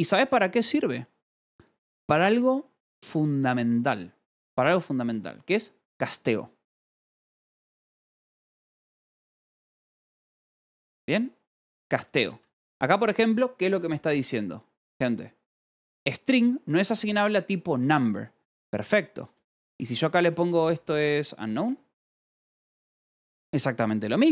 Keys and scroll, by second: 7.5-9.1 typing, 11.4 h, 19.8-22.0 typing, 22.2 Escape.